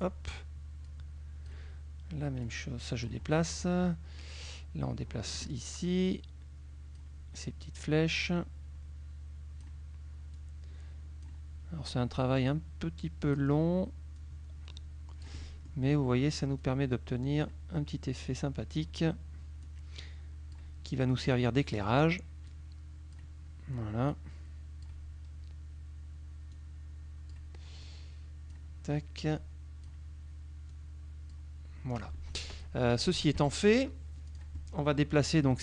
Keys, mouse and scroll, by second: 1.0 click, 2.6 click, 4.6-5.6 drag, 6.2-7.3 drag, 8.4-9.9 drag, 10.4-11.5 drag, 12.6-13.6 drag, 14.2-16.0 drag, 16.7-17.7 drag, 18.4 click, 19.7-20.8 drag, 21.2 click, 22.6 click, 24.2 click, 26.6 click, 27.9 click, 29.4 click, 30.8 click, 32.0 click, 33.0 KP_Subtract, 33.4 F1, 34.3 click, 35.3 click.